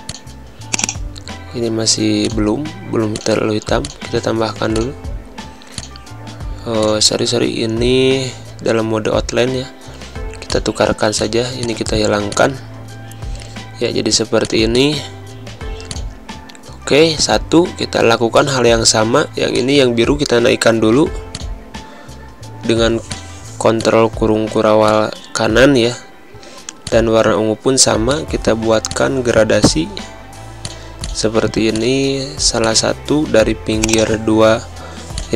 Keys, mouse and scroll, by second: 8.3 c, 10.4 click, 14.3 click, 15.5 z, 15.8 click, 16.3 space, 16.5 click, 16.7 space, 18.3 click, 22.0 ctrl+shift+1, 23.0 click, 23.6 space, 24.7 click, 26.7 click, 27.1 click, 28.9 click.